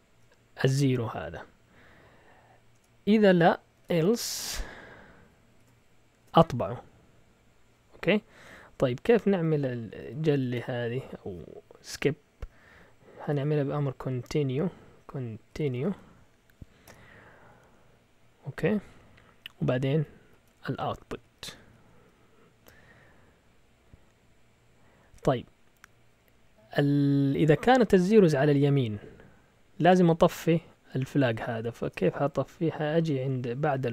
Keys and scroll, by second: 2.7 Return, 3.5-6.7 typing, 8.4 Up, 9.3 Up, 10.0 End, 10.2-10.9 typing, 13.0-13.9 typing, 15.0-16.8 typing, 19.7 Down, 19.9 Down, 20.3 Down, 20.9 Up, 21.0 Up, 21.2 Up, 21.4 Up, 21.5 Up, 21.7 Up, 21.9 Up, 30.1 Down, 31.1 Up, 31.3 Up, 31.8 Return.